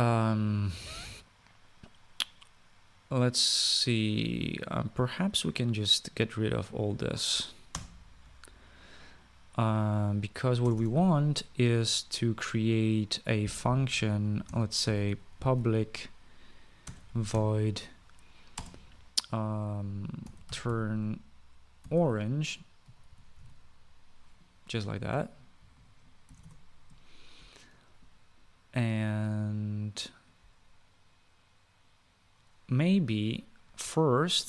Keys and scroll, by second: 8.5 BackSpace, 11.4 Return, 11.5 Return, 11.7 Up, 15.0-19.3 typing, 20.8-24.6 typing, 26.1-27.0 typing, 27.2 Return.